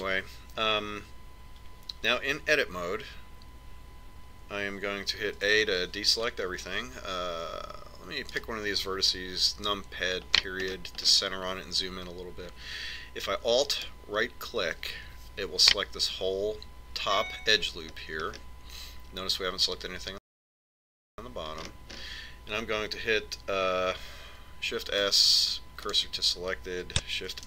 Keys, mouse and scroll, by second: 1.2 Tab, 7.3 a, 10.2 right click, 11.5 KP_Decimal, 12.2-14.9 middle drag, 15.6 right click, 19.7-22.1 middle drag, 25.7 shift+s.